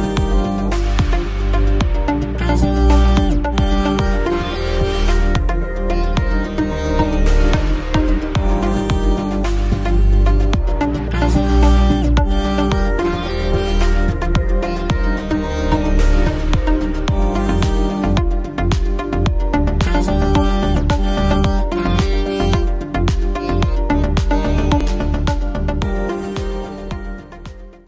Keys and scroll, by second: 3.1 shift+space.